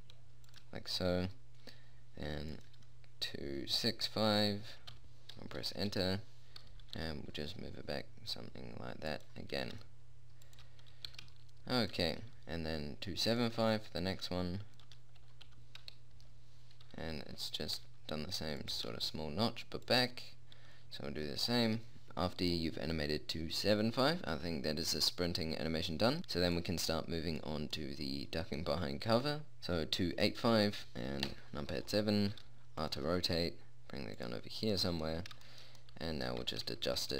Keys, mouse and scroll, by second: 2.9-6.1 drag, 7.3 g, 10.0 r, 11.5 g, 13.9-15.6 drag, 18.1 r, 19.1 g, 22.3-23.7 middle drag, 24.4-26.2 drag, 26.2 middle click, 26.9 click, 28.5 middle click, 31.7 KP_7, 32.7 r, 33.3 g, 36.7 g.